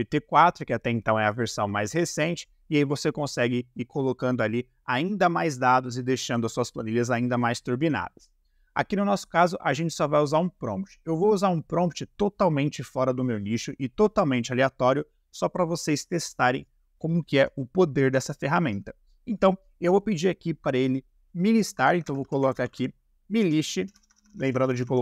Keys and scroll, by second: 21.7-23.9 typing.